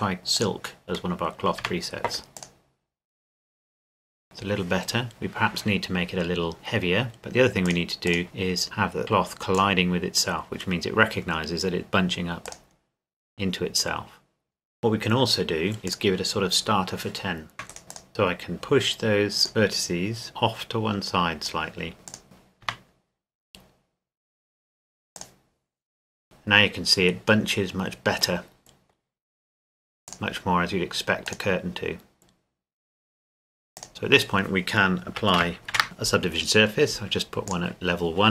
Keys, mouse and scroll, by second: 1.1 middle click, 1.6 Tab, 2.4 click, 7.6 click, 12.4 click, 14.8 Tab, 15.9-17.5 drag, 17.5 Tab, 17.7 alt+shift+right click, 18.1-19.5 drag, 19.5 alt+right click, 20.4 click, 22.1 click, 22.6 Tab, 25.2 click, 28.4 middle click, 30.1 click, 30.6 middle click, 31.3 click, 33.8 click, 35.7 ctrl+1, 37.5 click.